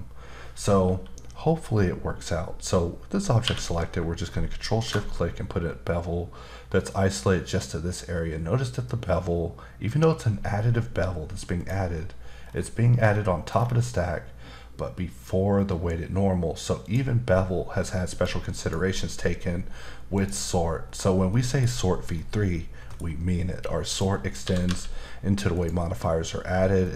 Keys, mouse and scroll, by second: 3.4 q, 4.8 ctrl+shift+click, 11.6 click, 12.4-13.0 scroll down 2, 13.0-13.5 scroll down 2, 13.5-14.1 scroll down 3, 15.8 scroll down 2, 16.8 click, 18.1 click, 18.6 click, 20.1 click, 20.9-21.3 scroll down 2, 21.3 middle click, 21.7-22.2 scroll down 1, 22.2 middle click, 23.9 click, 24.4 typing, 25.5 click, 26.8 middle click.